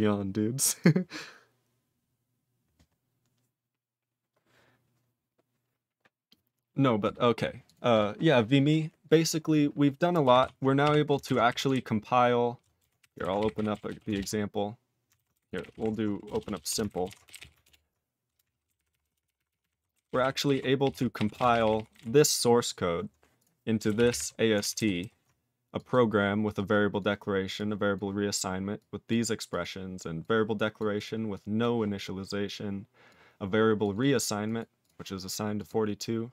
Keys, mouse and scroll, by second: 7.0 right click, 7.7 click, 7.9 click, 9.5-10.4 scroll up 1, 10.4 ctrl+s.